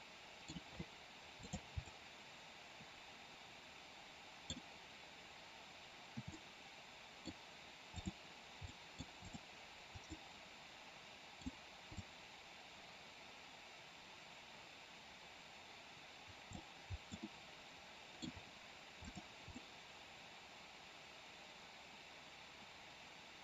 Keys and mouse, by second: 1.4 click, 1.9-4.4 middle drag, 6.4 middle click, 7.9-8.5 drag, 8.5-9.0 middle drag, 9.2-9.6 drag, 10.0-11.4 middle drag, 11.9-16.6 drag, 17.2-18.2 middle drag, 19.0 click, 19.5-23.4 middle drag.